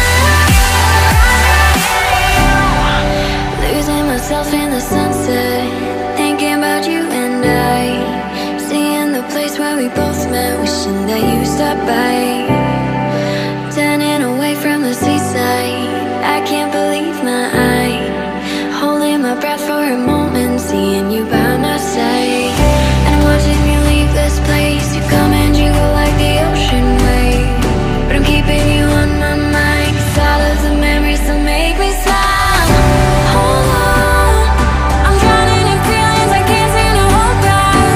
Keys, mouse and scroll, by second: 2.4-3.2 typing, 10.6-11.4 typing, 29.8 double click, 31.9 double click.